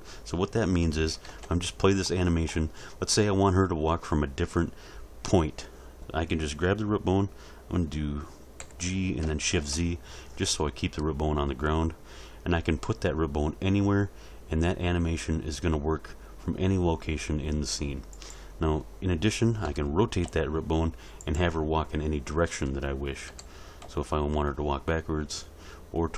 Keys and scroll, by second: 1.3 alt+a, 8.6 g, 9.5 shift+z, 19.6 r, 20.2 z, 23.3 r, 23.8 z.